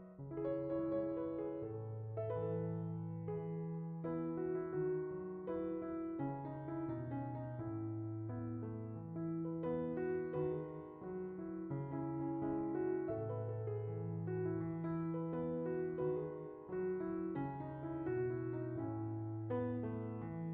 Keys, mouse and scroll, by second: 1.0 middle click, 2.2 click, 3.0-3.4 drag, 4.3 middle click, 5.2-5.6 drag, 6.2-6.6 middle drag, 7.0 shift+middle click, 7.6 click, 8.7 click, 9.7 click, 10.5 middle click, 11.2 click, 11.4-11.8 shift+middle drag, 12.0-12.4 middle drag, 13.0-13.4 drag, 13.7-14.3 drag, 14.9-15.3 drag, 16.1-17.2 middle drag, 17.2-17.5 scroll up 3, 17.5 shift+middle click, 18.6-20.5 middle drag.